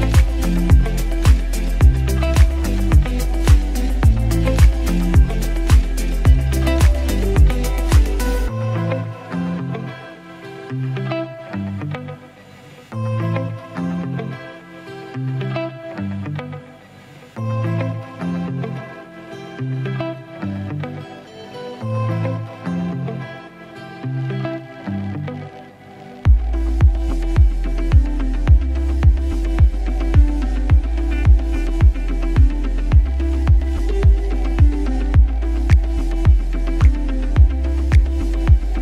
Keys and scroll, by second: 2.1 v, 3.3 space, 4.9 space, 10.4 m, 11.3 space, 25.8 ctrl+d, 29.3 space, 29.9 space, 38.6 ctrl+d.